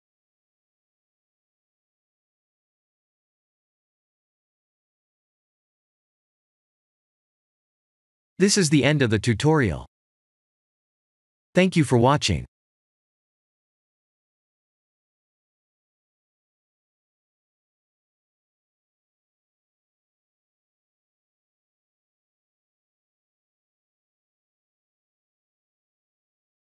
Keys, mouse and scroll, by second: 0.4 click, 1.9 ctrl+1, 3.9 click, 4.6 ctrl+1, 4.7 ctrl+1, 5.5 click, 6.4 ctrl+1, 6.7 click, 7.1 scroll up 2, 7.5 middle click, 9.7 scroll up 2, 10.1 middle click, 15.8 scroll down 3, 16.4 middle click.